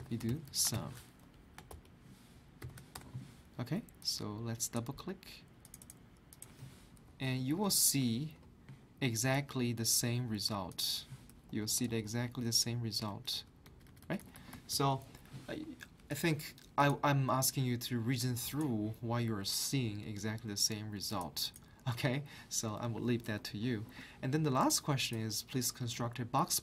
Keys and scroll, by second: 0.0 =, 1.0-1.7 typing, 2.7 shift+Left, 2.9 Return, 7.1 ctrl+Down, 11.5 Left, 11.7 Left, 11.9 Left, 12.0 Left, 12.2 Left, 12.5 Left, 13.1 Right, 13.3 Up.